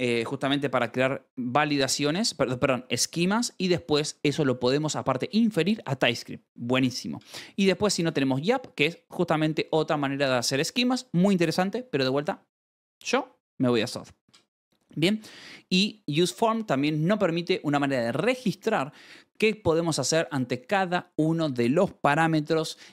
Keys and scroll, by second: 7.3-8.2 typing, 8.3 Escape, 11.7-12.6 typing, 14.1 Escape, 14.9 k, 15.3 shift+v.